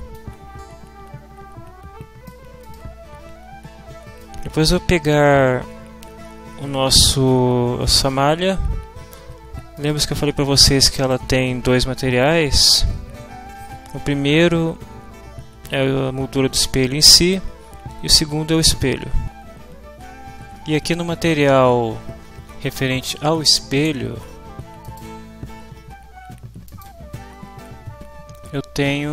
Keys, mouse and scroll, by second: 0.1-2.4 drag, 2.6 click, 4.2-7.2 drag, 9.8 click, 10.9 click, 12.1 click, 24.8 click, 26.6 click.